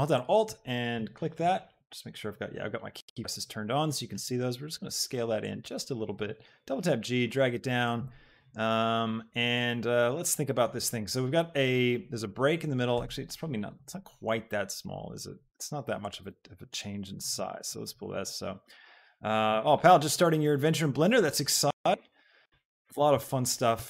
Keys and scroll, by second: 4.1 s, 6.3 g, 12.9 s, 15.5 s, 23.6 ctrl+r.